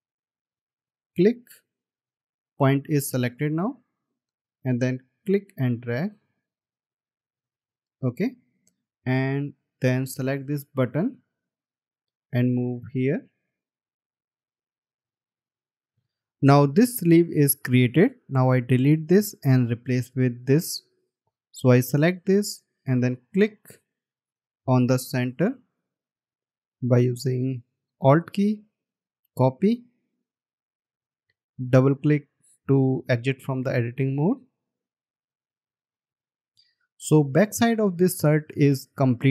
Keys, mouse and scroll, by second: 8.5-8.9 alt+scroll down 1, 9.4 space, 10.7-11.4 alt+scroll down 1, 20.2 Delete, 24.5 right click, 25.7 scroll up 1, 27.4 alt+click, 35.3 double click, 36.2 alt+scroll down 1.